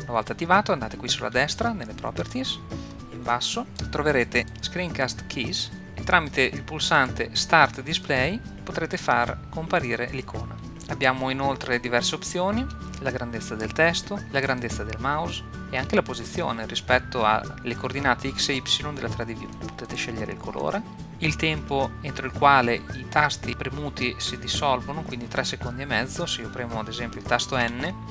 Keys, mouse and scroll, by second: 1.2 n, 3.6-5.9 drag, 7.0 click, 10.8-12.7 drag, 14.6-15.6 drag, 19.5 click, 19.9-21.0 drag, 27.6 n.